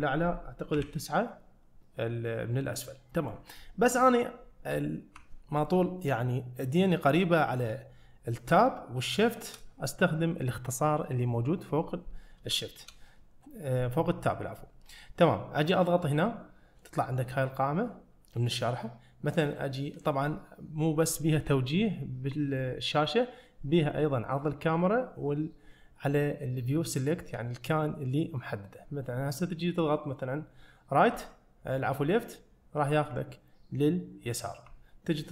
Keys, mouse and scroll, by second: 0.8 KP_9, 2.9-3.4 middle drag, 4.7 `, 9.2-9.7 shift+middle drag, 12.7 shift+middle drag.